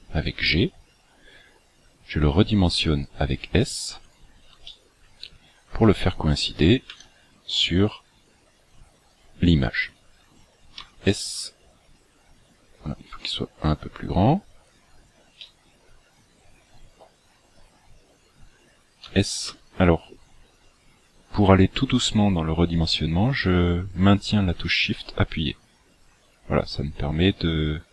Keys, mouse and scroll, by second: 2.2 s, 4.7 shift+middle click, 5.5 scroll up 1, 6.9 g, 10.7 s, 15.4 shift+middle click, 19.1 s.